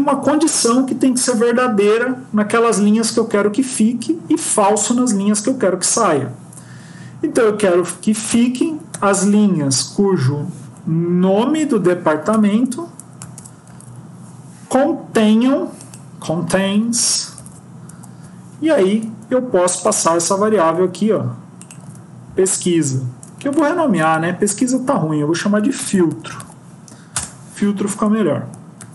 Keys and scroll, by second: 10.0 Up, 17.8 Left, 20.6 ctrl+c, 21.7 ctrl+v, 24.5 F2, 27.1 Return, 28.7 ctrl+s.